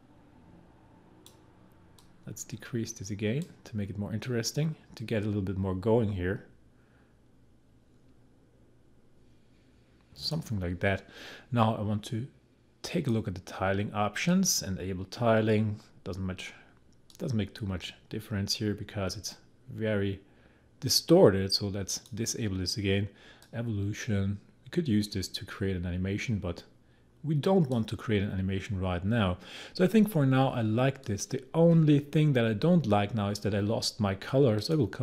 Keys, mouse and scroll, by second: 17.1-29.7 drag, 34.6 click.